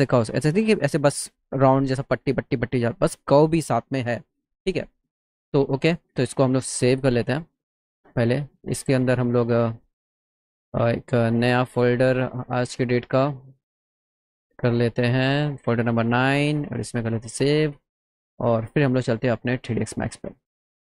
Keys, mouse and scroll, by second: 5.6 click, 6.6 click, 9.3 click, 10.1 middle click, 10.9 middle click, 12.4 click, 13.3 click, 15.3 click, 15.5 click, 17.1 click, 19.9 click.